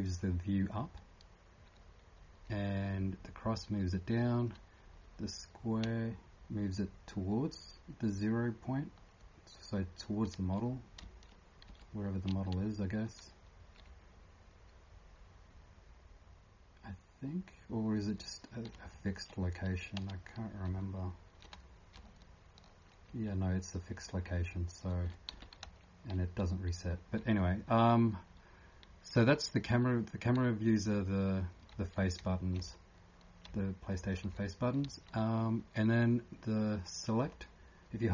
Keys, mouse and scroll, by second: 0.0-3.2 typing, 5.8-7.1 typing, 10.0-18.6 typing, 20.9-24.4 typing, 31.9-32.7 typing, 34.0 2.